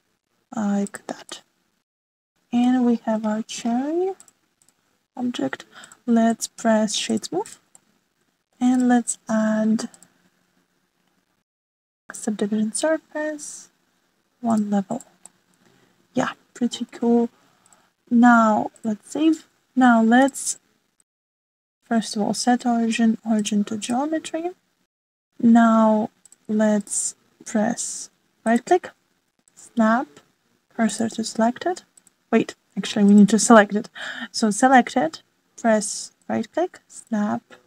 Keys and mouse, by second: 2.3-3.7 middle drag, 5.2 click, 8.1 click, 8.7 middle click, 9.8 click, 10.8 ctrl+1, 10.9-13.2 drag, 15.5 click, 15.9 click, 16.3-17.9 middle drag, 18.6-19.6 drag, 21.1 click, 24.4-24.8 drag, 27.2 click, 27.8 click, 29.4-31.9 drag, 32.9 click, 37.1-37.6 drag.